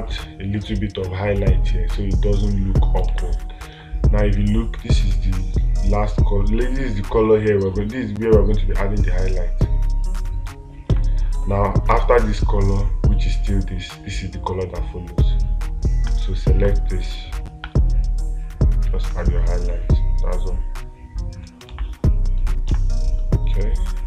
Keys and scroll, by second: 3.5 space, 11.3 space, 22.2 space.